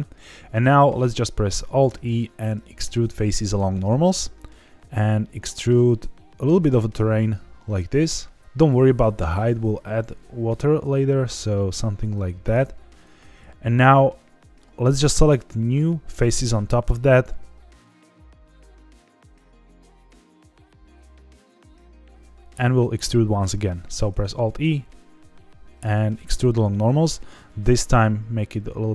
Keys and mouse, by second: 1.8 alt+e, 12.4 shift+click, 13.6 middle click, 15.0 click, 18.4 shift+click, 19.2 shift+click, 19.5 middle click, 19.8 middle click, 20.2 shift+click, 20.5 middle click, 21.0 shift+click, 21.2 middle click, 21.7 shift+click, 21.8-23.4 middle drag, 23.9 alt+e.